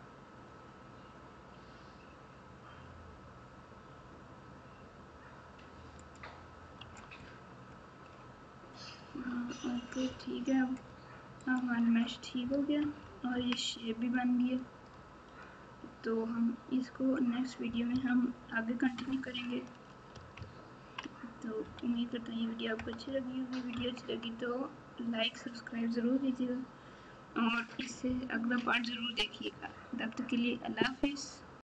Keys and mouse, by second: 6.7 Tab, 9.0 Tab, 11.4 click, 12.7 KP_6, 12.9 KP_6, 17.9 KP_1, 18.8 KP_Subtract, 19.0 KP_Subtract, 20.3 ctrl+KP_6, 20.8 ctrl+KP_6, 21.6 KP_Subtract, 21.8 KP_Subtract, 22.7 KP_Add, 23.7 ctrl+KP_2.